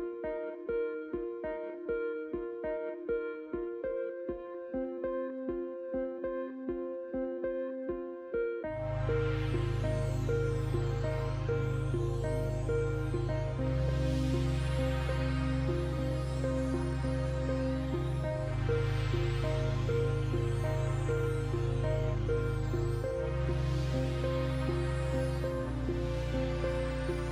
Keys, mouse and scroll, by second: 0.8 ctrl+w, 1.7 click, 10.5 click, 16.5 click, 20.6 alt+scroll up 1, 21.6 alt+scroll up 1, 22.6 click.